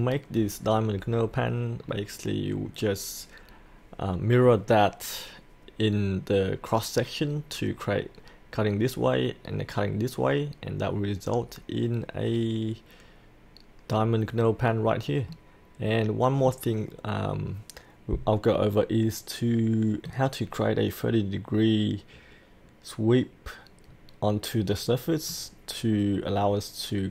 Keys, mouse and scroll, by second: 1.8-15.3 scroll down 1, 15.3-20.4 middle drag, 20.5 scroll down 1, 23.9-25.3 scroll up 1, 25.3-27.1 middle drag.